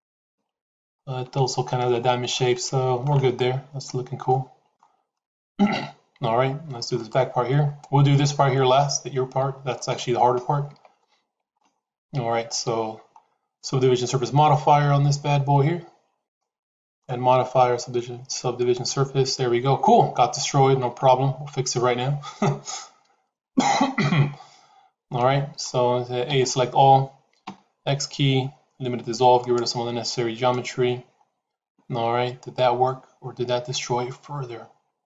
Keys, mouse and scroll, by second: 0.9-2.3 shift+middle drag, 2.5 middle click, 4.2 shift+middle click, 5.0-6.6 middle drag, 6.9 click, 10.6 Tab, 11.5 shift+middle click, 12.1 Tab, 16.8-18.8 drag, 20.7 Tab, 25.1 middle click, 26.2 a, 27.3 x, 30.4-35.0 middle drag.